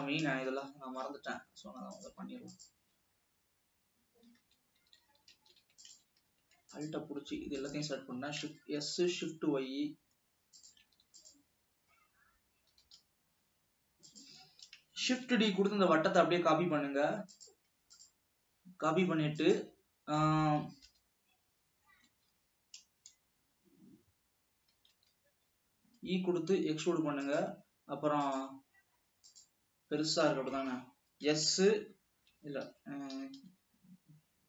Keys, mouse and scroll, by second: 0.6-2.2 shift+middle drag, 2.2 click, 2.8-3.1 drag, 4.8 a, 5.6 alt+a, 6.0 alt+click, 7.0 alt+shift+click, 7.8 shift+click, 8.5 s, 11.1 alt+a, 11.4 click, 13.0 g, 15.3 shift+d, 21.1 s, 24.9-25.3 scroll up 1, 25.3 e, 30.6-31.6 scroll down 2, 31.6 s, 33.4 g.